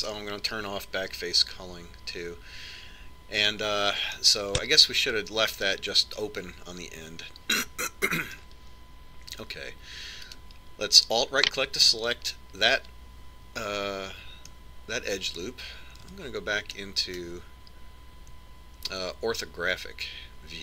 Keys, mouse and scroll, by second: 0.3-2.3 middle drag, 4.4 click, 5.2-7.0 middle drag, 11.4-13.3 right drag, 15.7-17.4 middle drag, 17.2 KP_5, 17.9-20.4 middle drag.